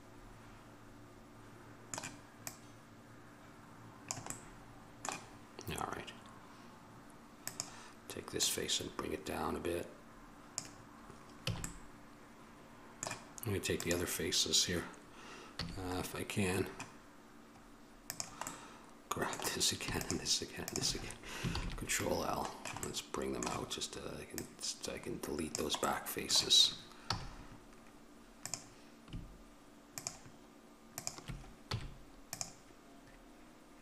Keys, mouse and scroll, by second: 1.6-7.6 middle drag, 7.6-10.7 drag, 11.7 a, 12.0 middle click, 14.0-15.8 right drag, 15.8 a, 16.1-18.3 middle drag, 18.3-21.7 right drag, 18.8-21.5 middle drag, 21.7 ctrl+l, 23.0 middle click, 23.2 middle click, 25.1 click, 26.1-27.3 middle drag, 27.3 a, 28.6-32.2 right drag, 32.2 click.